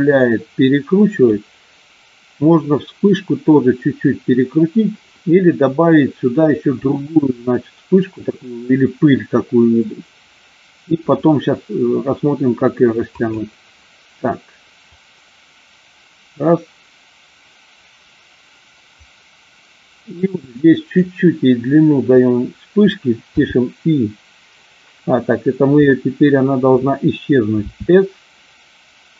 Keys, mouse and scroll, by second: 13.1 click, 15.0 click, 23.3 i, 27.6 s.